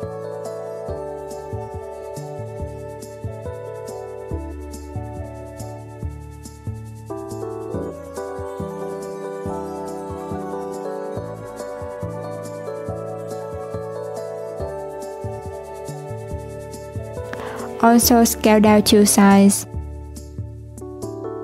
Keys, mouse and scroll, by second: 1.2 click, 1.9 click, 3.1 click, 3.4 s, 6.8-8.0 middle drag, 8.0 alt+z, 8.2-10.3 middle drag, 10.3 click, 12.1 Tab, 13.1 Tab, 13.6 s, 15.6 Tab, 16.4 alt+z, 16.6 click, 17.6 s, 19.6 click.